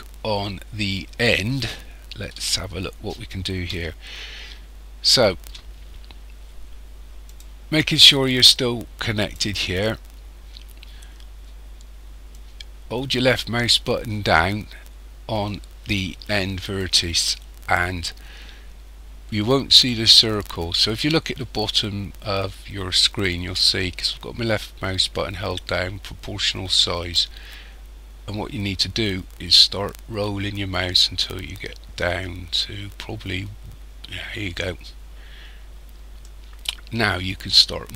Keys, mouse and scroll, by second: 2.3 KP_7, 3.9 shift+scroll down 1, 4.0 shift+middle click, 7.3 click, 12.3 click.